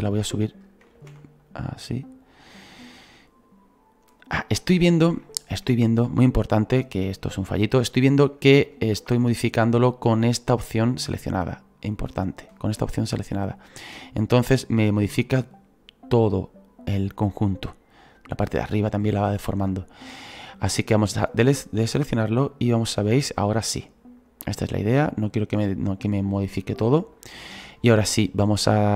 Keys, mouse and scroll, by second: 1.0 ctrl+z, 1.4-8.6 drag, 7.9 shift+middle click, 8.6 ctrl+z, 9.3-11.9 middle drag, 11.9-20.4 drag, 21.4-25.5 drag, 27.2-28.9 drag.